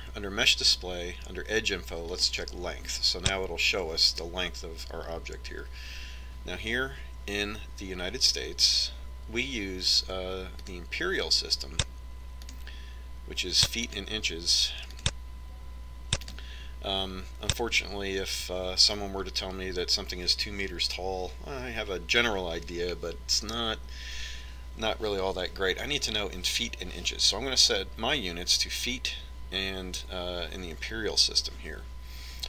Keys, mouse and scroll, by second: 3.3-5.0 drag, 11.7-15.5 drag, 16.0-18.0 drag.